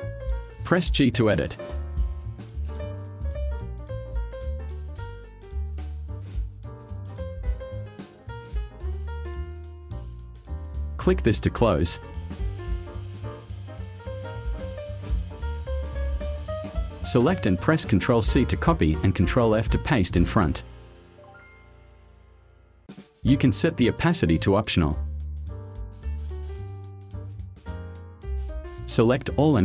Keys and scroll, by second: 0.5 g, 14.3 v, 15.4 space, 18.3 ctrl+c, 20.2 ctrl+f, 24.7-25.5 typing, 26.2 Return.